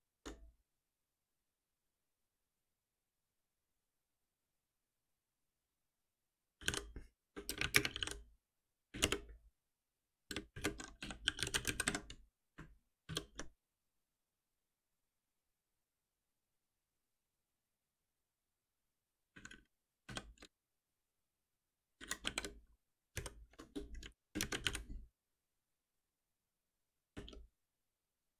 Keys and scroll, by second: 7.2 Return, 11.8 Escape, 13.0 shift+F10, 23.2 ctrl+alt+m.